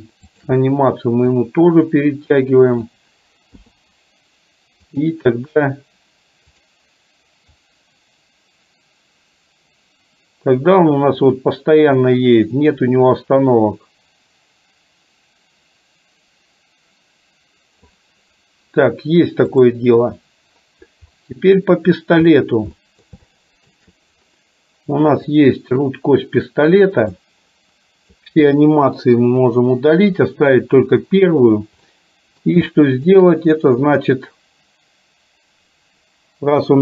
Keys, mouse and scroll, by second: 0.3 shift+click, 1.5-3.2 drag, 3.7 i, 5.0 click, 6.6 click, 7.6-18.1 drag, 19.6 click, 21.2-21.6 middle drag, 22.5 middle click, 22.8 middle click, 23.3 shift+middle click, 27.2-28.3 drag, 29.3 Delete, 32.0 middle click, 32.8 shift+middle click.